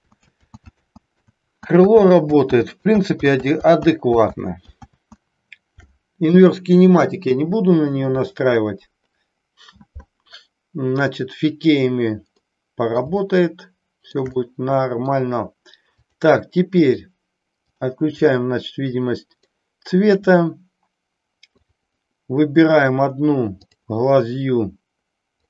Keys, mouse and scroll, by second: 0.0 ctrl+z, 0.3 ctrl+z, 1.3 ctrl+z, 2.1 ctrl+z, 2.7 ctrl+z, 3.1 ctrl+z, 3.6 ctrl+z, 4.0 ctrl+z, 4.5 ctrl+z, 5.0 ctrl+z, 12.5 middle click, 13.4-14.4 shift+middle drag, 14.5 middle click, 16.0 click, 17.7 click, 18.2-19.5 middle drag, 21.6 click, 23.6 click.